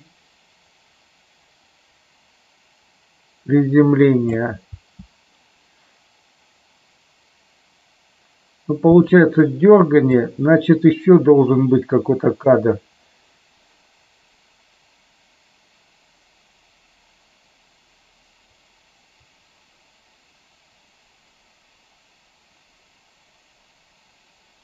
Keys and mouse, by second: 4.8 space, 9.0 space, 10.1-24.6 drag.